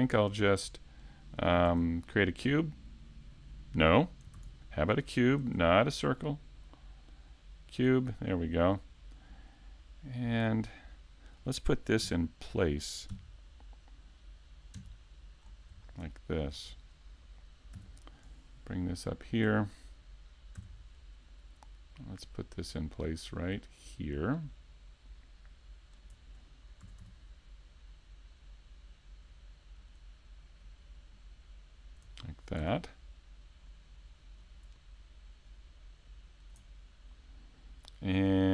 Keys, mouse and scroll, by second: 0.1 shift+a, 1.7 shift+a, 5.4 shift+super+a, 9.3 click, 10.7 middle click, 12.0 KP_3, 13.1 KP_5, 14.8 KP_1, 15.5-15.8 scroll up 3, 15.8 shift+middle click, 16.7-17.2 scroll up 1, 17.7 s, 22.6 click, 23.4 click, 29.9 click, 30.6 click, 32.6 click, 34.5 click, 35.5 click, 38.2 middle click.